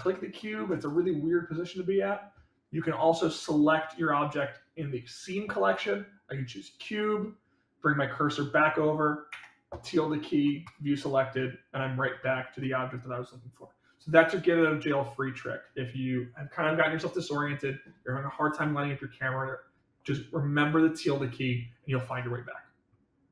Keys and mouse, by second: 0.3 shift+middle drag, 5.7 click, 11.4-12.0 middle drag, 12.6-13.6 middle drag.